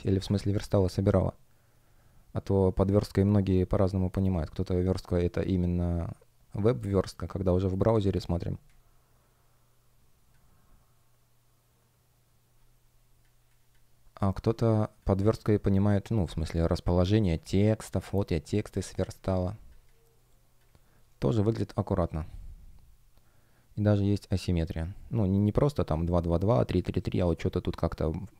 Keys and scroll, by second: 8.6 space, 18.7 space, 20.8 shift+щ.